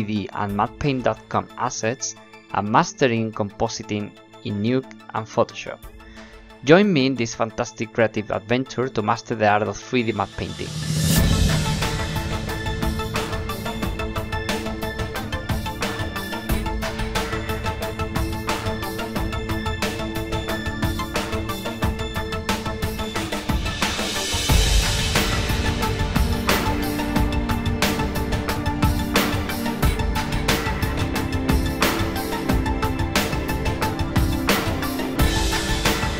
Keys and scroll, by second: 0.5 shift+b, 33.1 b, 34.4 shift+b, 34.8 shift+b.